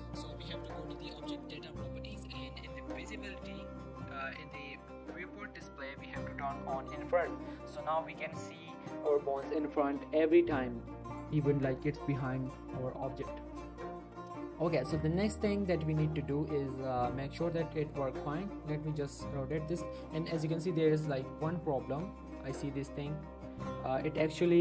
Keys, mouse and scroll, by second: 1.4 click, 3.2 click, 5.9 scroll down 1, 7.3 click, 7.7 middle click, 7.9 g, 8.2 right click, 11.1 middle click, 11.5 f, 15.0 z, 15.9 Tab, 17.0 click, 17.3 r, 17.7 right click, 18.2 click, 18.3 r, 18.8 right click, 19.5 click, 19.8 r, 20.6 right click, 21.1 click, 21.2 r, 21.9 right click, 22.5 click, 22.7 r, 24.2 right click.